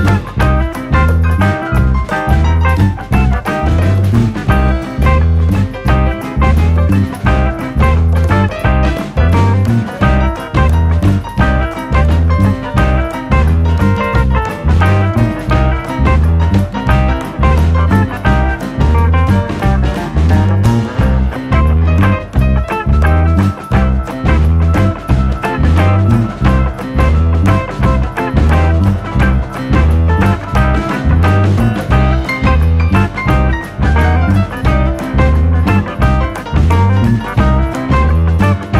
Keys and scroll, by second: 0.2 p, 9.7 p, 23.2 p, 34.4 r.